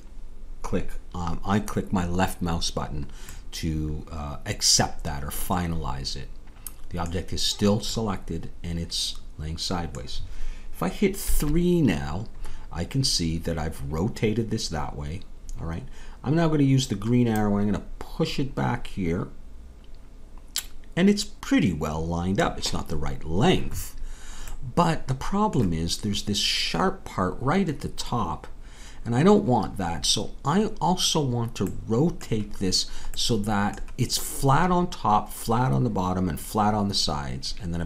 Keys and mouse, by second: 3.8-11.2 middle drag, 11.2 KP_3, 17.3-22.3 drag, 24.5-26.8 middle drag.